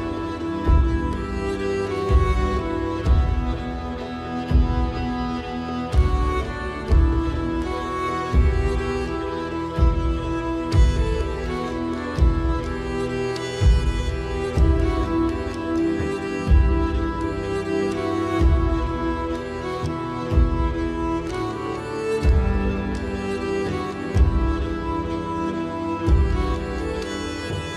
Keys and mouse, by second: 1.7 shift+middle click, 4.6 1, 5.8 click, 8.1 g, 10.8 z, 12.6 shift+middle click, 16.7 middle click, 17.8 click, 18.7 click, 19.9 KP_7, 21.9 shift+middle click.